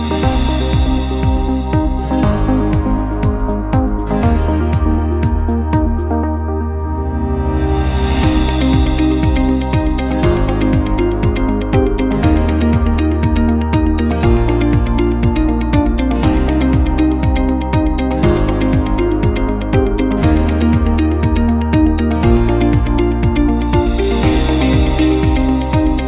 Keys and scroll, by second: 16.5 1, 16.8 Return, 18.0 1, 18.2 Return.